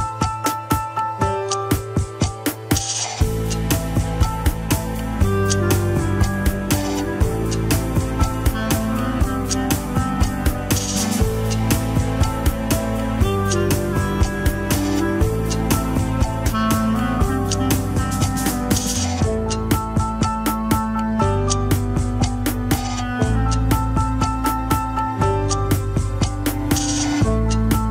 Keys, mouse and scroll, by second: 0.1-0.6 scroll down 2, 0.7 click, 1.4 ctrl+Tab, 1.8 a, 2.5 alt+g, 2.5 scroll up 6, 3.9 click, 4.8 g, 6.9-7.3 scroll down 2, 7.3 ctrl+Tab, 7.4 shift+click, 7.8 ctrl+Tab, 8.9 ctrl+click, 9.2 middle click, 9.9 scroll up 1, 10.7 ctrl+click, 11.0 scroll up 2, 12.7-17.0 drag, 17.4-20.3 drag, 21.6 ctrl+click, 23.4 ctrl+click, 23.7-25.6 drag, 27.5-27.9 drag.